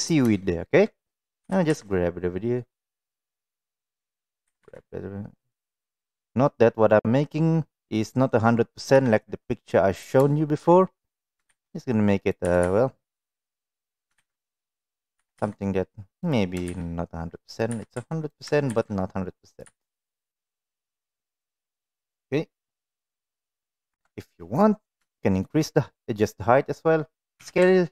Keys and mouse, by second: 0.4 shift+middle drag, 1.4 g, 5.7 middle click, 8.9 KP_7, 10.3 shift+middle drag, 11.4 shift+d, 12.4 r, 14.1 shift+d, 15.1 r, 16.6 shift+d, 17.7 r, 18.7 shift+d, 19.6 r, 20.8-23.4 middle drag, 23.8 KP_1, 25.0 shift+middle click, 27.3 s.